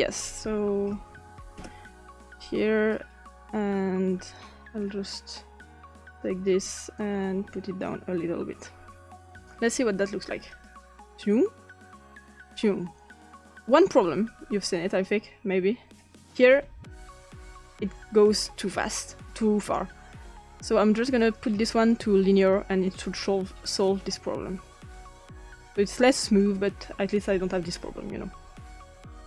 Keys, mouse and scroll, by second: 0.6-2.0 typing, 4.3 click, 5.9 click, 7.0 click, 9.3-9.7 drag, 10.5 click, 14.3-18.3 drag, 19.6 click, 21.2 click, 21.8 click, 22.4 click, 23.8-27.9 drag.